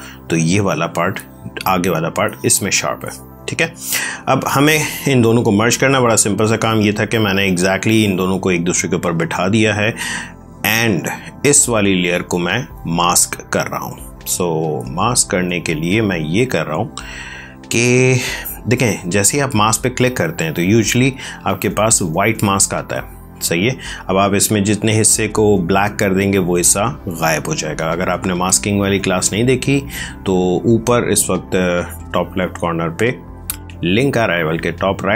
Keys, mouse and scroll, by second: 0.1 space, 0.4 click, 0.6 space, 1.0 click, 1.1 space, 2.0 click, 2.9 space, 3.5 click, 3.7 space, 4.4 ctrl+click, 8.9 click, 13.7 click, 20.1 click.